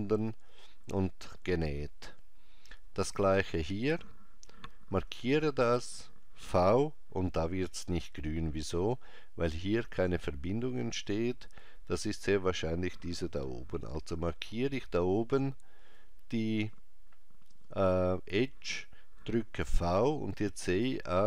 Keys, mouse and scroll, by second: 4.9 alt+click, 6.5 v, 14.5 alt+click, 15.0 alt+click, 19.6 v.